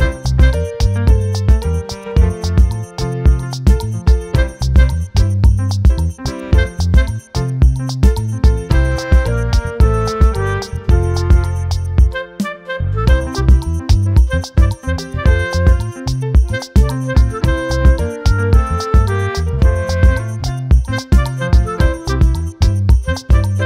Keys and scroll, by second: 8.2 ctrl+t.